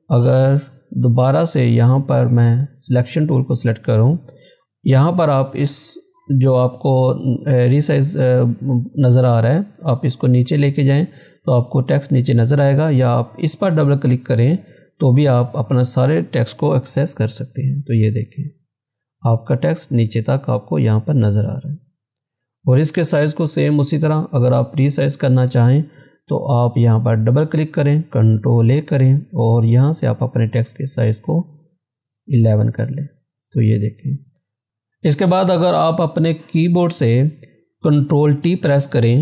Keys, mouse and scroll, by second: 2.4 click, 7.2-11.5 drag, 11.5 scroll down 1, 12.1-13.7 scroll, 13.7 click, 15.0 scroll down 1, 17.2 ctrl+-, 22.6 ctrl+=, 24.4 scroll up 1, 26.9 click, 28.4 ctrl+a, 30.4 click, 32.7 click, 33.4 scroll up 1, 34.6-36.7 drag.